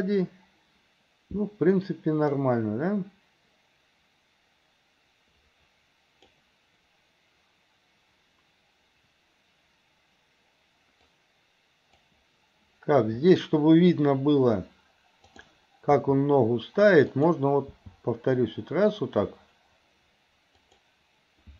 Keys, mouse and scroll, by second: 2.4-6.4 drag, 11.2 click, 15.3 click, 16.0 r, 17.7 g.